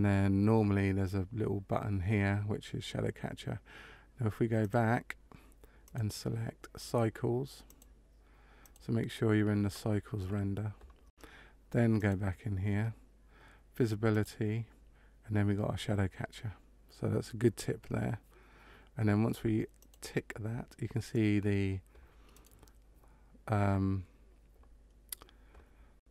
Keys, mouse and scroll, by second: 4.5 click, 5.8 click, 7.6 click, 11.9 click, 14.0 click, 19.7 click, 22.2 right click.